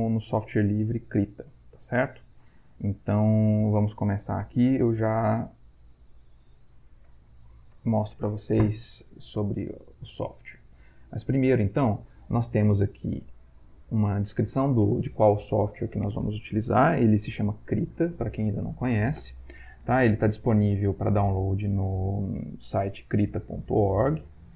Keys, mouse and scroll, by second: 7.1 click, 7.8 Right, 11.1 click.